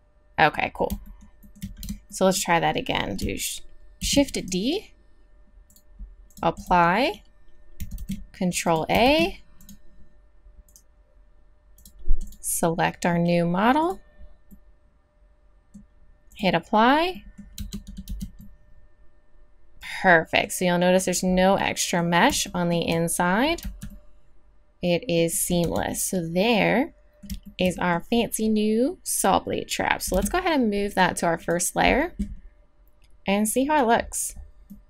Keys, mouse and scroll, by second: 1.9 Tab, 4.0 shift+d, 8.0 ctrl+a, 8.6-10.7 drag, 9.0 ctrl+a, 14.5-16.3 middle drag, 16.3 click, 17.1-17.6 middle drag, 17.6 Tab, 17.9 click, 18.1 z, 21.3-23.6 middle drag, 23.6 z, 24.2-25.2 middle drag, 25.7 Tab, 30.1 m, 33.6-34.0 drag, 34.0-34.4 middle drag, 34.4 drag.